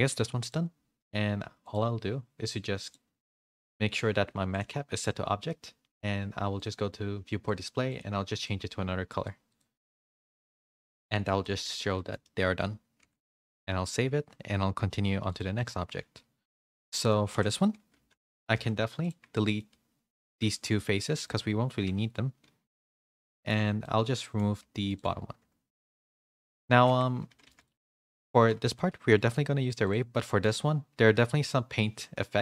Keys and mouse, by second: 0.1 Tab, 0.4 click, 1.6 click, 2.8 click, 4.6-5.6 drag, 6.5 click, 7.4 click, 7.8 click, 9.4 click, 10.3 click, 11.5 a, 11.7 a, 11.9 middle click, 12.2 shift+middle click, 12.9 ctrl+s, 16.5 shift+middle drag, 16.8 middle click, 17.9 /, 18.5 Tab, 18.8 3, 19.0 click, 19.3 middle click, 20.2 shift+click, 20.4 x, 21.7 Tab, 22.7 /, 23.2 middle click, 23.5 Tab, 23.8 middle click, 24.6 2, 25.2 ctrl+e, 26.2 middle click, 26.8 Tab, 27.3 a, 27.4 a, 27.8 middle click, 28.6 g, 29.8 click, 30.1 middle click, 32.3 click.